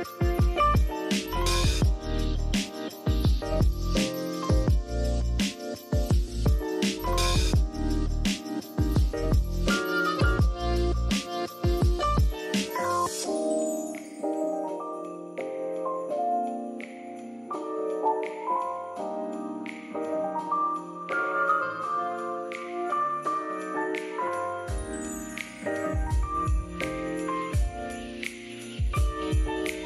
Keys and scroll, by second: 3.0 super+', 3.4-4.4 typing, 6.2 i, 7.2 super+z, 7.4-9.9 typing, 14.3 shift+super+{, 14.6-16.3 typing, 19.5 z, 20.2 v, 21.5 z, 27.0 super+z, 29.0-29.8 typing.